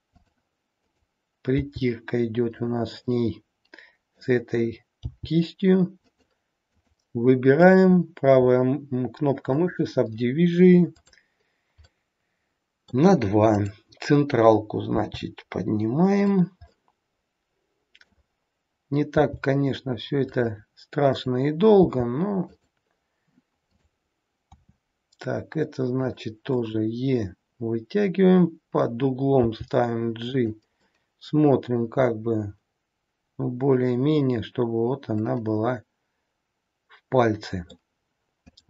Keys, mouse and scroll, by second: 0.9 click, 1.5 g, 3.1 middle click, 5.0 g, 6.6 click, 7.6 right click, 10.9 click, 11.9 middle click, 11.9-12.3 scroll up 1, 13.5 click, 15.0 g, 16.6 middle click, 19.1 g, 21.1 click, 21.8 g, 23.6 click, 24.5 e, 26.6 middle click, 29.4 g, 30.8 scroll up 1, 30.9 middle click.